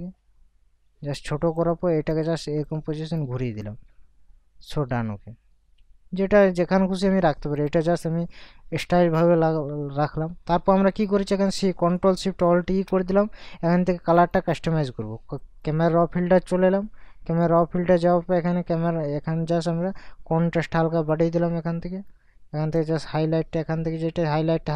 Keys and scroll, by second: 12.7 ctrl+alt+shift+e.